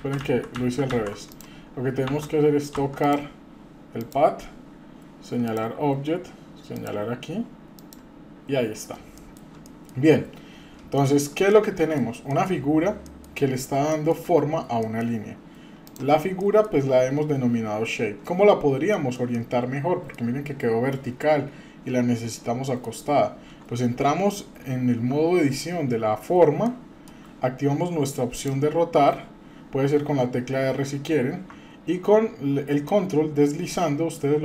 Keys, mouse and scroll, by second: 0.0 ctrl+z, 0.2 ctrl+z, 0.9 ctrl+z, 1.3 drag, 2.1 Tab, 2.7 Tab, 3.0 click, 4.0 click, 5.4 click, 6.7 click, 9.2-9.5 shift+middle drag, 9.7 middle click, 11.0-11.3 shift+middle drag, 11.5-12.0 shift+middle drag, 12.3 middle click, 13.0 middle click, 13.5 scroll up 2, 13.9 shift+middle drag, 14.8 middle click, 15.9 click, 16.4-16.7 shift+middle drag, 18.4-18.7 scroll down 2, 18.9 middle click, 19.3-20.1 middle drag, 22.7 middle click, 23.0-23.9 scroll up 1, 25.1 Tab, 26.0-26.3 scroll up 2, 26.6 shift+middle click, 28.3 click, 32.8-34.4 ctrl+drag.